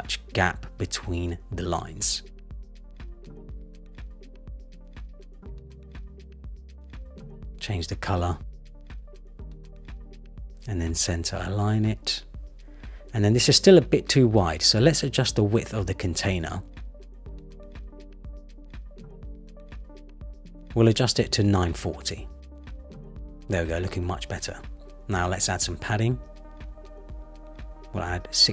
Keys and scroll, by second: 0.8 Down, 1.4 Down, 4.1 Up, 5.6 Down, 8.3 super+v, 8.6 Return, 18.2 Return, 19.3 shift+Up, 20.7 shift+Up, 27.4 Return.